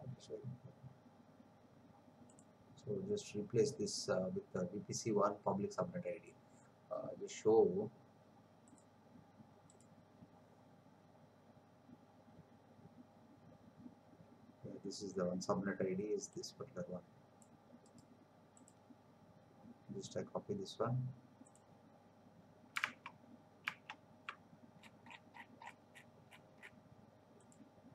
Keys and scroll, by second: 23.0 alt+Tab.